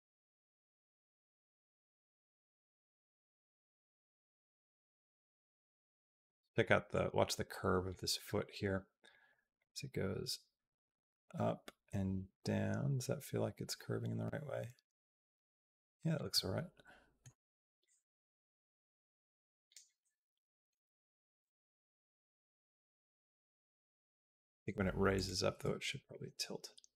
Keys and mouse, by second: 1.6-5.5 drag, 5.6 middle click, 6.8-7.8 drag, 8.9 click, 9.4-16.0 drag, 16.3 middle click, 17.7-19.6 drag, 19.8 middle click, 21.2-24.5 drag, 25.5 r.